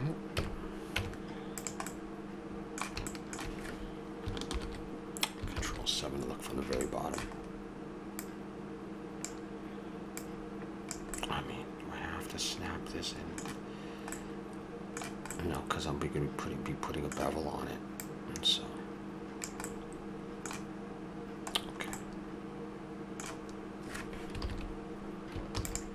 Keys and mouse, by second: 0.3 KP_Decimal, 0.9 Tab, 4.5 ctrl+l, 6.5 middle click, 7.0 middle click, 8.2-11.2 drag, 11.2-13.1 middle drag, 14.3-18.0 middle drag, 18.0-19.9 drag, 19.9 middle click, 25.6 shift+d.